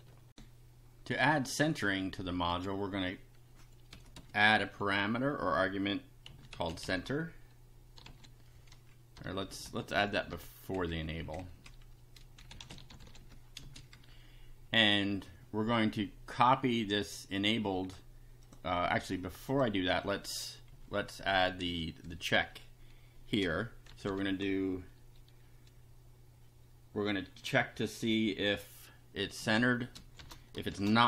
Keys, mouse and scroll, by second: 0.3 ctrl+r, 2.5 click, 3.9 ,, 4.1 space, 6.0-8.0 typing, 9.2 BackSpace, 10.7 Left, 12.1-13.7 typing, 14.0 Down, 16.7-18.1 drag, 18.4 click, 19.5 click, 20.7 Right, 21.6 space, 23.9 shift+7, 29.4-31.0 typing.